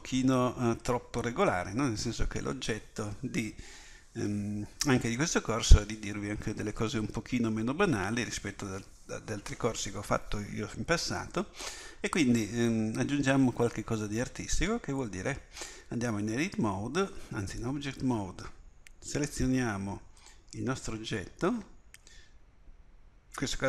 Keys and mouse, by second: 17.6 Tab, 19.1 click.